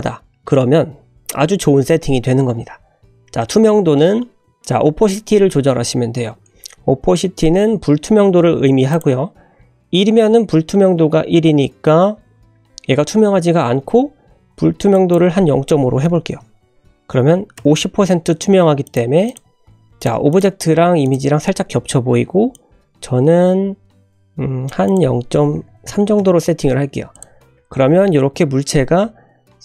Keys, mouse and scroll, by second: 8.9 click, 14.9-18.1 drag, 18.8 click, 19.2 click, 19.9 click, 20.3 click, 21.0 click, 22.5-24.6 drag, 24.8-26.7 drag, 27.1 click, 27.6 click, 28.3 scroll down 1.